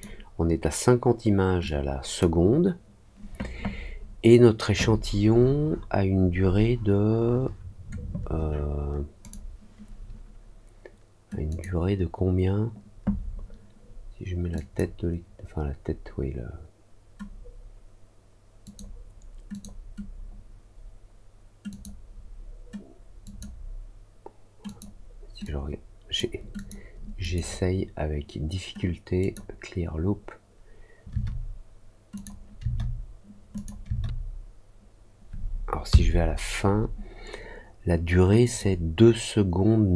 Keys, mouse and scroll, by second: 1.6 click, 19.5-27.1 drag, 27.1 right click, 38.4-39.9 drag.